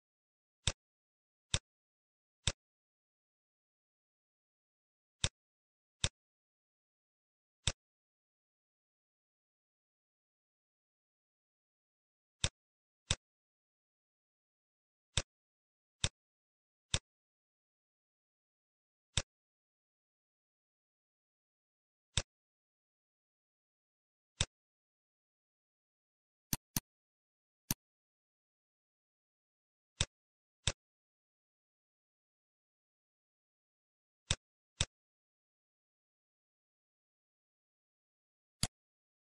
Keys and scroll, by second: 2.8 shift+a, 9.4 shift+a, 30.8 shift+a, 32.4 p.